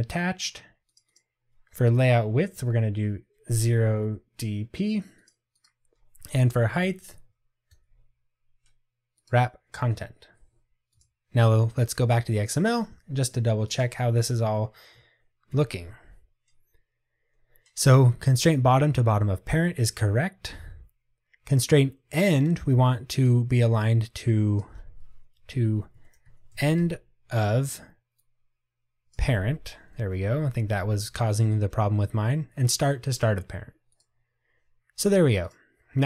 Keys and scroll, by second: 30.6 Tab.